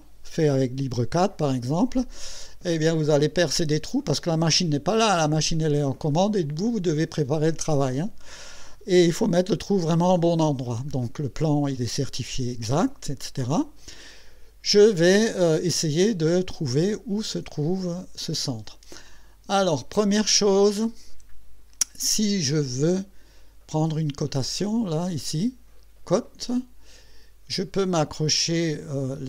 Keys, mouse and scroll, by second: 26.2 click.